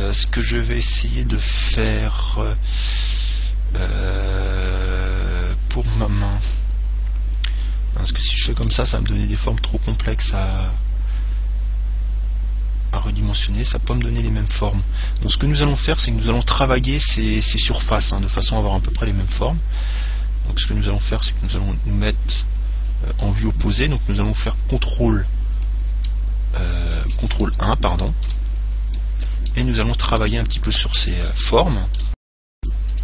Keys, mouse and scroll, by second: 0.6-2.6 middle drag, 20.3 KP_3, 21.5 KP_1, 22.8-25.2 middle drag, 26.2 ctrl+KP_3, 27.7 ctrl+KP_1, 29.0-33.0 middle drag.